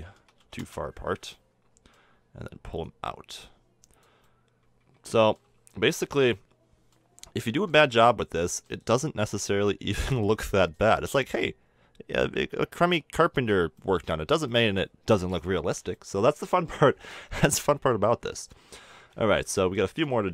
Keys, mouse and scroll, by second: 0.3 click, 1.2-1.9 middle drag, 5.7 KP_3, 9.3-10.7 middle drag, 10.7 click, 13.7 middle drag, 14.5-15.2 middle drag.